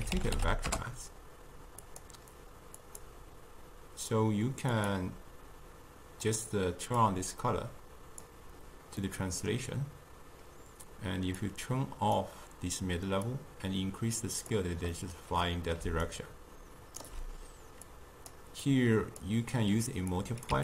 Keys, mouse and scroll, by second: 2.8-5.9 drag, 7.0-9.1 drag, 9.1-11.4 middle drag, 11.4-15.0 drag, 15.0-15.9 middle drag, 15.9 d, 16.1-17.1 right drag, 17.1 d, 17.4 d, 17.9 click, 18.7 click, 20.2 click.